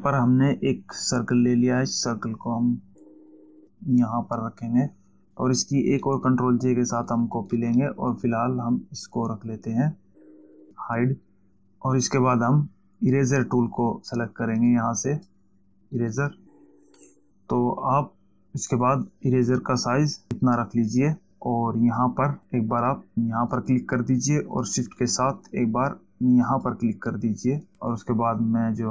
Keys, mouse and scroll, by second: 3.4 click, 8.0 ctrl+j, 11.0 click, 15.2 click, 16.6 click, 24.0 click, 27.0 shift+click.